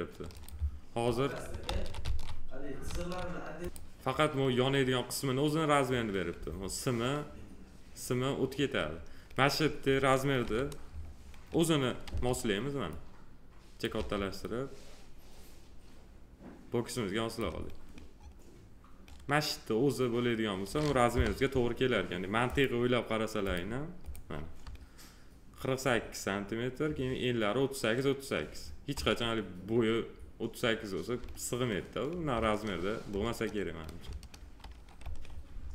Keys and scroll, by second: 1.7 ctrl+z, 10.4 g, 12.1 r, 13.9 w, 21.1 p.